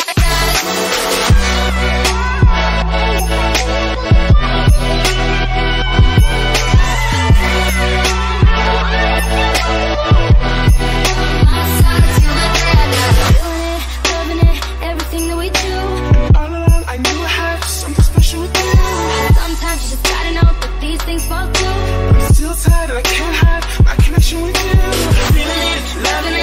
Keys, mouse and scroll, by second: 2.1 click, 3.1-9.6 drag, 9.7 click, 11.6 click, 11.8 ctrl+-, 16.1 click, 18.6-26.4 drag.